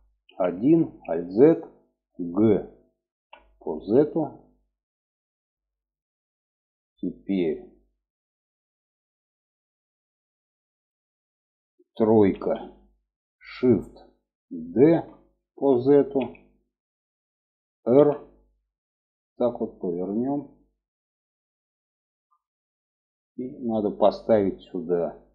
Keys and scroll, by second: 0.1 alt+z, 2.5 g, 11.7 3, 14.2 shift+d, 17.3 r.